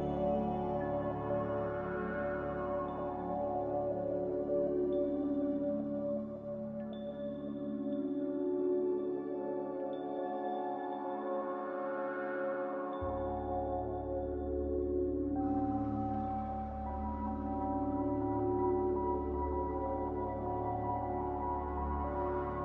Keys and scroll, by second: 3.2 q.